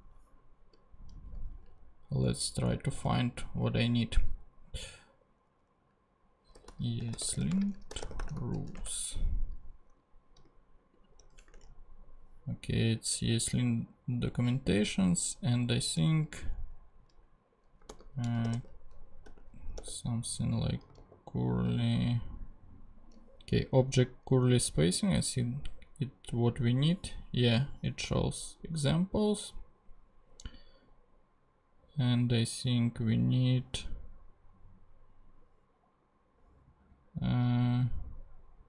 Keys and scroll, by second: 6.3-8.9 typing, 11.5 ctrl+super+Tab, 12.3 ctrl+Tab, 17.9 super+f, 18.2 super+c, 18.3-20.3 typing, 21.0 super+g, 21.7 super+g.